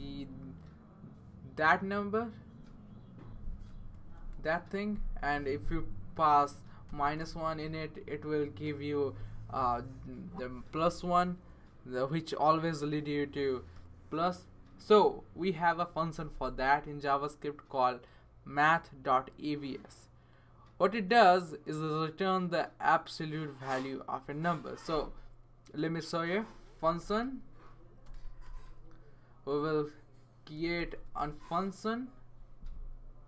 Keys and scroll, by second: 0.4 BackSpace, 0.5 BackSpace, 0.6 BackSpace, 3.9 typing, 4.9 Left, 6.6-7.6 typing, 15.9-16.5 typing, 18.1 typing, 24.9 Return, 26.5-28.9 typing, 30.3-31.7 typing.